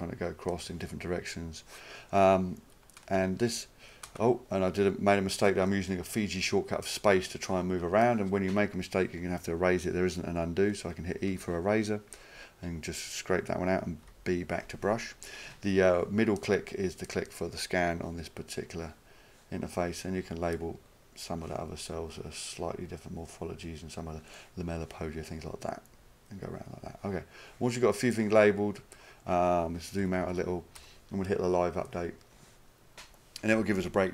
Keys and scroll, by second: 3.1-3.9 space, 11.3 e, 14.1 b, 30.0 -, 30.2 -, 30.3 -, 30.8 -.